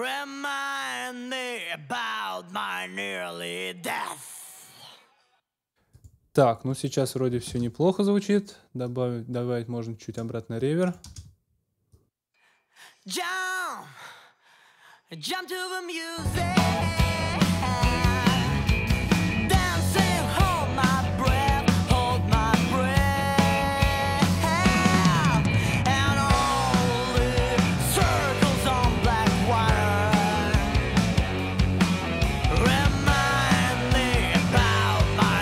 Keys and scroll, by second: 5.1 space, 7.5 super+s, 11.0 space.